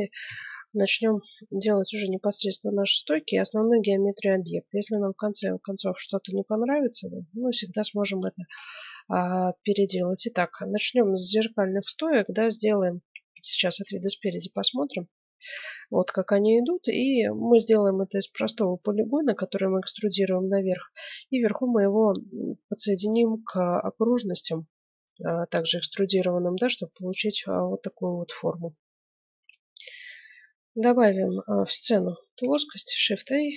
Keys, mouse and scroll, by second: 0.3 n, 1.0-7.5 middle drag, 8.5-10.5 middle drag, 12.2-13.8 middle drag, 13.2 KP_1, 26.9 middle click, 27.5-29.3 drag, 29.3 F9, 30.9 middle click, 31.8 click, 32.4 shift+a.